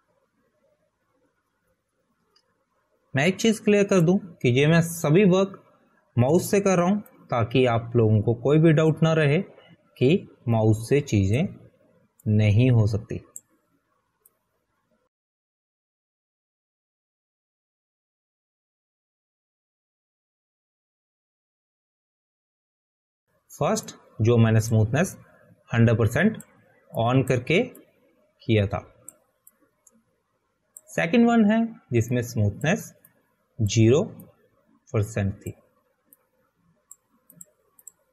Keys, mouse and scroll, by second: 9.5 click, 13.2 click, 21.3 click, 23.2 ctrl+z, 23.4 ctrl+z, 25.1 click.